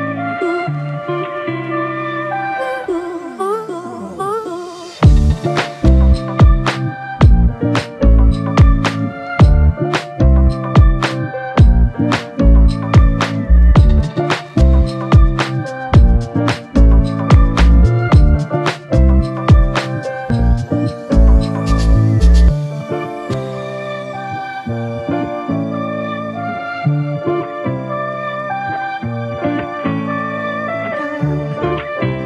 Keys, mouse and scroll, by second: 9.3 typing, 22.0 ctrl+click, 24.8 ctrl+click, 27.1 ctrl+click, 29.4 ctrl+click.